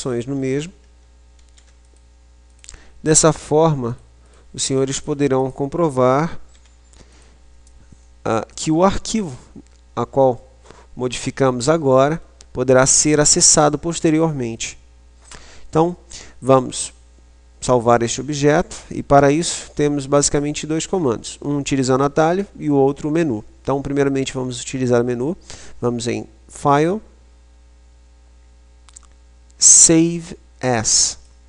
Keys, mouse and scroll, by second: 1.2 ctrl+r, 2.7-6.3 drag, 5.2-7.3 right drag, 6.7 e, 7.5 click, 8.3 middle click, 9.3 Tab, 10.3 middle click, 12.8 middle click, 26.7 click.